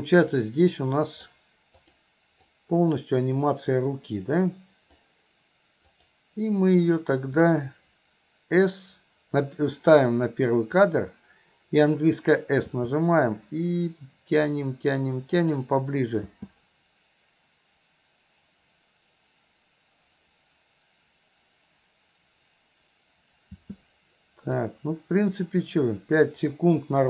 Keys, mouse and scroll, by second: 0.4-1.3 drag, 1.9 click, 2.6-5.2 drag, 6.0 click, 10.1-11.0 drag, 12.7 s, 16.3 space, 23.6 space, 24.7-27.0 drag.